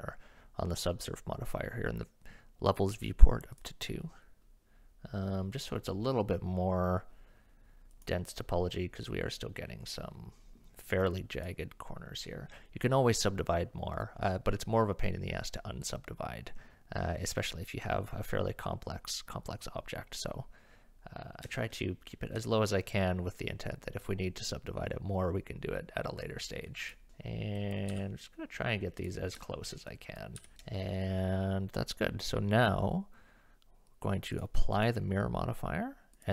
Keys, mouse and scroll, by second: 3.6 click, 7.9 click, 11.4 click, 21.7 shift+middle click, 26.7 click, 27.1 g, 27.6 click, 27.9 g, 29.4 shift+click, 29.9 click, 30.4 g, 34.4-34.9 drag, 36.2-36.3 drag.